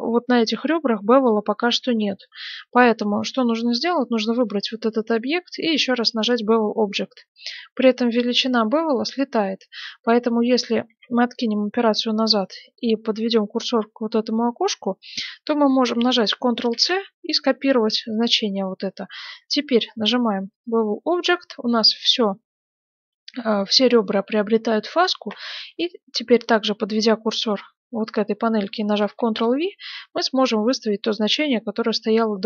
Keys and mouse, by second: 1.1-2.8 right drag, 2.8-4.0 drag, 4.0-6.3 middle drag, 6.3-10.8 drag, 10.8 ctrl+z, 16.7 ctrl+c, 20.6-28.9 drag, 28.9 ctrl+v, 30.2-32.4 middle drag.